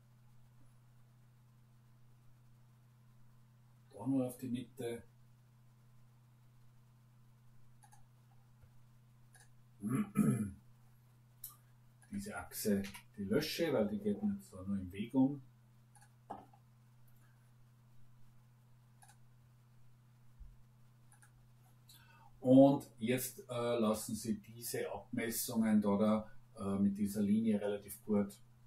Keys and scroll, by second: 12.8 Delete.